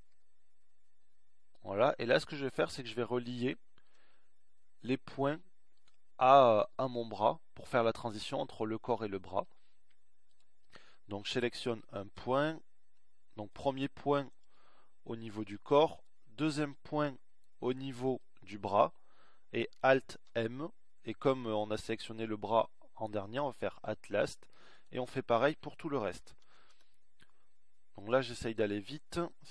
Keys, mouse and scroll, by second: 0.0 s, 11.6-13.3 middle drag, 14.2 click, 17.9 right click, 20.3 alt+m, 26.5 alt+m.